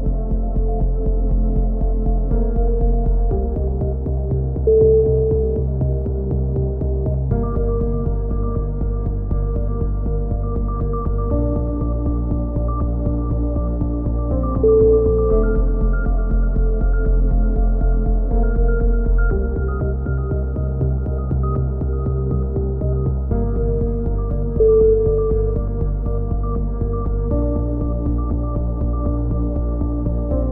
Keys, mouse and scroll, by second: 0.0 middle click, 0.6 z, 0.8 right click, 1.8 ctrl+KP_7, 2.4 middle click, 3.2 click, 4.2 z, 4.5 z, 5.1 click, 5.8 a, 6.1 z, 7.2 click, 8.1 middle click, 8.2 z, 8.7-10.0 right drag, 9.4 x, 10.3-12.1 middle drag, 10.3 z, 10.8 a, 12.2 middle click, 14.9 middle click, 15.2 z, 15.6 z, 15.8 click, 16.6 z, 16.8 middle click, 17.2 click, 18.2 f, 18.4 a, 19.9 click, 20.3 ctrl+KP_7, 22.3 z, 22.8 a, 23.2 click, 25.3 middle click, 25.5 z, 26.2 click, 27.1 right click, 27.6 alt+m, 28.3 a, 28.5 middle click, 28.6 z, 29.3 z.